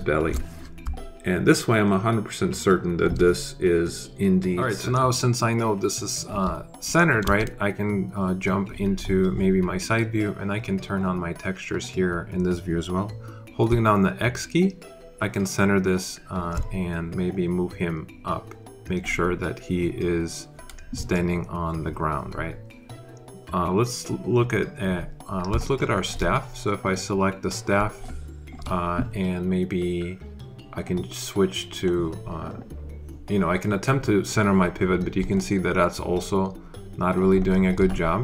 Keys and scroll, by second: 7.1 alt+space, 13.6 x.